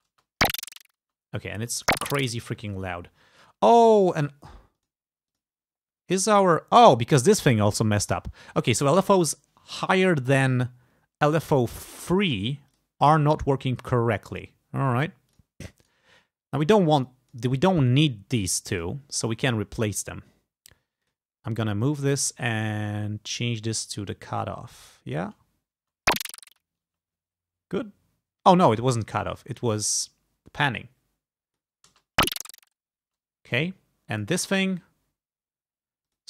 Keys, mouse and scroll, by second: 0.0 space, 1.2 space, 2.6 space, 3.4 click, 4.9 click, 5.3 click, 6.2 click, 12.7 click, 13.9 click, 15.4 click, 15.9 right click, 17.0 click, 17.8 right click, 18.9 click, 19.5 click, 21.1 click, 24.2-25.2 drag, 25.3 space, 27.0 space, 28.9 click, 30.7-31.8 drag, 32.0 space, 33.2 space, 33.5 click, 34.2 click, 36.1 click.